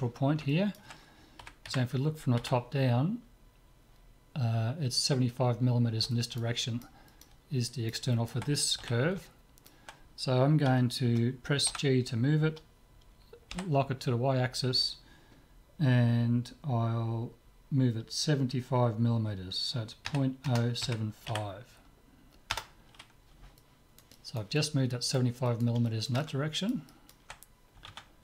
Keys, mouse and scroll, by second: 0.5-2.3 middle drag, 1.4 KP_7, 1.8 KP_5, 2.5 z, 3.0-4.9 middle drag, 5.1-5.6 scroll up 1, 5.6 middle click, 8.8 z, 9.8-11.1 middle drag, 11.7 g, 23.6-28.2 middle drag.